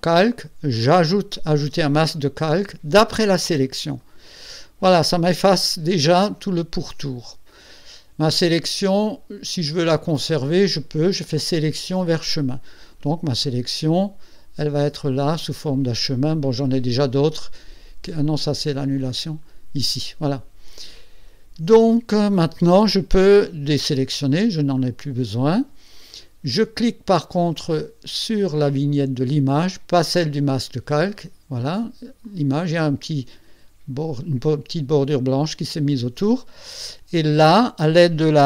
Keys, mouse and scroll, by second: 1.7 click, 4.0 click, 11.0 click, 12.2 click, 14.8 click, 19.3 click, 20.9 click, 24.0 ctrl+shift+a, 24.7-25.1 ctrl+scroll up 2, 25.5 ctrl+middle click, 27.7 click, 32.2 click.